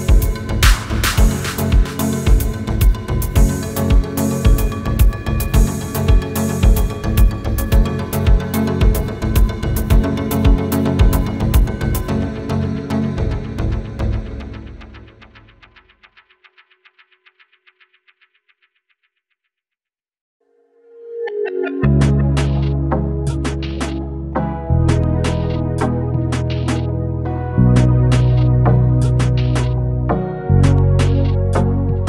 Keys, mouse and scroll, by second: 0.4 space, 0.8 click, 3.6 Down, 3.8 click, 8.0 Down, 8.2 click, 9.2 Up, 9.3 click, 9.7 Up, 9.8 click, 13.2 right click, 14.1 click, 16.2 ctrl+j, 16.7 ctrl+space, 16.9 ctrl+click, 17.2-17.6 ctrl+space, 18.1 ctrl+space, 18.2 ctrl+click, 18.5-19.0 click, 19.0 ctrl+space, 19.1-19.8 ctrl+click, 19.4 ctrl+space, 22.2 click, 29.4-30.4 typing, 31.2 click.